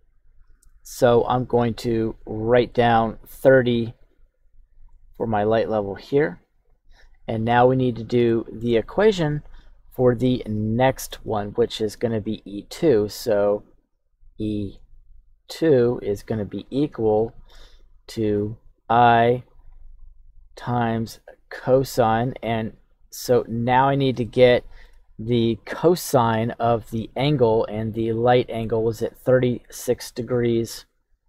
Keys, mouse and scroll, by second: 1.8-3.7 right drag, 3.7-4.9 drag, 5.3-6.5 drag, 7.7-8.2 scroll down 1, 8.2 scroll down 1, 8.2 shift+middle click, 9.4 KP_1, 10.0-10.5 scroll up 1, 10.7 shift+middle click, 12.3-12.8 scroll down 1, 12.8 click, 12.8 scroll down 1, 13.5 click, 14.1 click, 14.6 click, 15.1 click, 15.9 click, 16.3 click, 17.1 shift+middle click, 18.0 click, 18.6 click, 19.5 click, 20.0 click, 20.4 click, 21.0 click, 21.7 click, 23.2 click, 24.2 shift+middle click, 27.9 click.